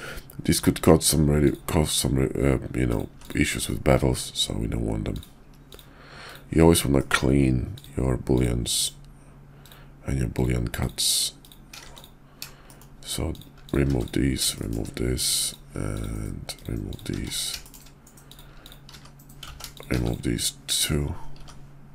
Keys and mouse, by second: 1.4 click, 1.6 x, 3.1 x, 3.6 middle click, 6.2 shift+click, 6.9 shift+middle click, 7.6 shift+click, 9.5 shift+click, 10.2 shift+click, 11.3 shift+click, 11.8 x, 12.6 shift+click, 13.6 shift+click, 13.9 x, 14.5 shift+middle click, 15.4 click, 15.8 shift+click, 16.5 shift+click, 17.1 x, 17.5 shift+click, 18.5 shift+click, 18.8 x, 19.4 ctrl+z, 19.6 shift+click, 19.9 shift+x, 20.0 click, 21.3 x.